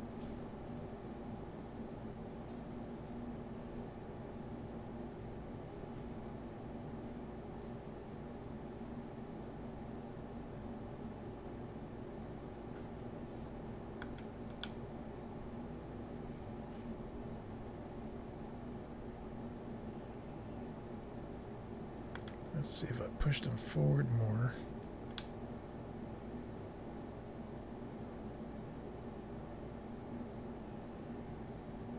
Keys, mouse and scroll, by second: 14.6 middle click, 15.3 scroll up 1, 23.6 click, 25.2 middle click.